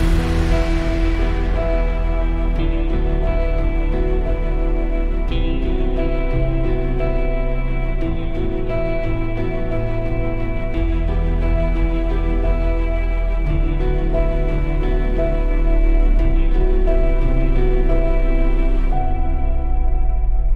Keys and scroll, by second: 5.1 super+Tab, 7.4 super+=.